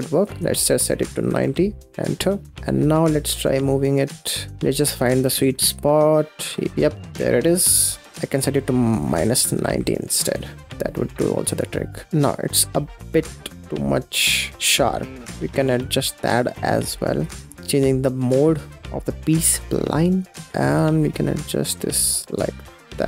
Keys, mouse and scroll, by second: 2.8-4.7 shift+drag, 5.1 ctrl+z, 5.5-10.8 shift+drag, 10.9-11.9 shift+drag, 12.1 middle click, 12.2-12.5 scroll up 5, 12.5 middle click, 13.4-17.1 drag, 17.5-18.7 scroll down 1, 18.8-19.2 scroll down 6, 19.2-20.4 drag, 20.4 scroll down 1, 20.5 middle click, 20.6-23.0 shift+drag.